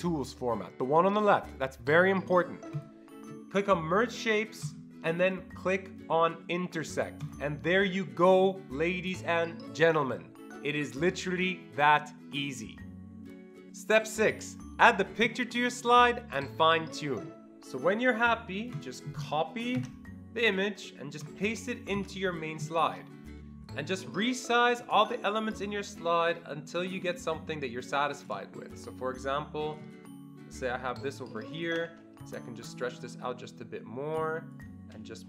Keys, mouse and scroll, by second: 2.8 ctrl+click, 4.6 ctrl+click, 18.8 click, 19.8 ctrl+c, 21.3 click, 22.0 ctrl+v, 23.7-25.2 shift+drag, 25.2 shift+double click, 26.3-32.5 shift+drag, 31.8 Escape, 32.5-35.2 drag.